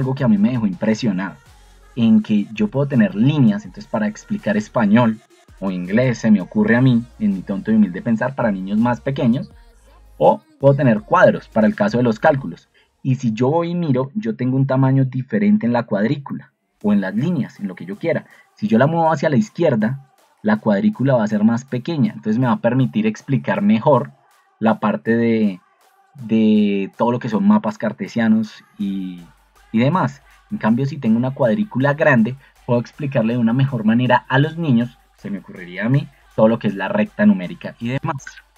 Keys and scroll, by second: 14.1 ctrl+2, 19.3 Escape.